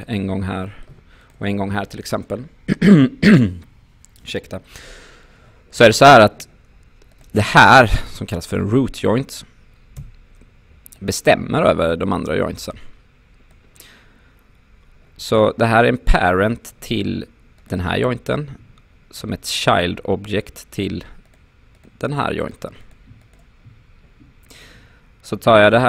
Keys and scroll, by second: 5.9 q, 10.0 e.